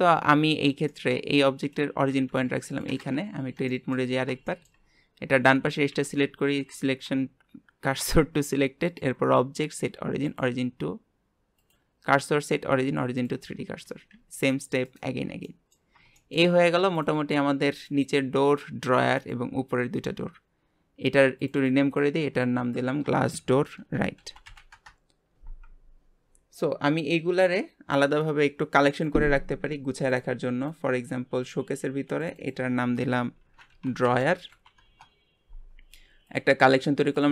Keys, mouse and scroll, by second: 0.9-3.3 middle drag, 3.3 Tab, 3.7 middle click, 4.1 scroll up 2, 4.5 shift+middle click, 4.8-5.3 scroll up 1, 5.3 click, 5.9 shift+s, 6.7 Tab, 8.9-13.8 drag, 13.8 r, 15.2 scroll down 1, 15.4-15.9 middle drag, 15.9 scroll down 3, 16.2-16.9 shift+middle drag, 16.9 click, 17.8 click, 18.5 click, 19.2 click, 21.4 click, 21.6-24.8 drag, 28.9-30.2 drag, 30.7 click, 32.2 click, 32.4-35.6 drag, 36.2 click, 37.1 shift+click.